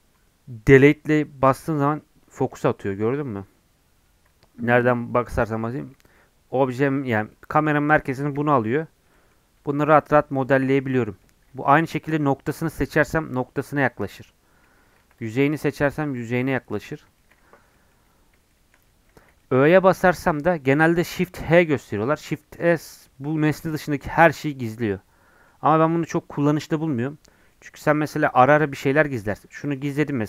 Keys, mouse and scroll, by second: 0.8 KP_Decimal, 1.6 scroll down 5, 1.8 middle click, 2.5 KP_Decimal, 3.0 middle click, 3.5-3.9 scroll down 11, 4.0 KP_Decimal, 4.6 middle click, 4.8-5.3 scroll down 5, 5.3 middle click, 5.6 KP_Decimal, 6.8 scroll down 4, 7.3-8.3 middle drag, 8.3 KP_Decimal, 8.6 scroll down 1, 9.1 scroll up 1, 9.7 Tab, 10.3 Tab, 10.5 middle click, 11.4 Tab, 11.6 1, 11.8-13.0 drag, 13.0 KP_Decimal, 14.0-14.8 scroll down 22, 15.0 3, 15.1 click, 16.0 KP_Decimal, 16.5 scroll down 1, 16.7 middle click, 17.5 Tab, 17.7 middle click, 18.1 scroll up 1, 18.5 shift+middle click, 18.8-19.4 scroll down 1, 19.4 middle click, 19.7 scroll down 1, 19.9-21.5 middle drag, 21.5 shift+h, 23.3-28.6 middle drag, 28.6 alt+h, 29.3-30.2 drag.